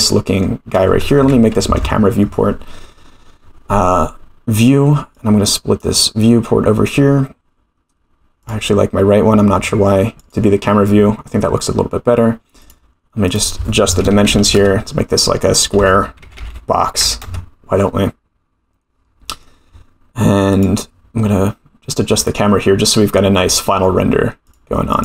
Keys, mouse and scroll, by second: 0.0-0.4 shift+middle drag, 1.7 ctrl+alt+KP_0, 5.1 click, 6.6-7.3 scroll up 3, 8.4 click, 9.2-10.0 scroll down 8, 10.2 click, 12.6 click, 13.3-15.1 drag, 14.2 0, 14.4 0, 15.5-17.8 drag, 16.4 0, 18.3-18.6 scroll down 2, 19.3 middle drag, 19.6-19.9 scroll down 4, 20.5 click, 22.1 click, 23.4 click, 24.4 click.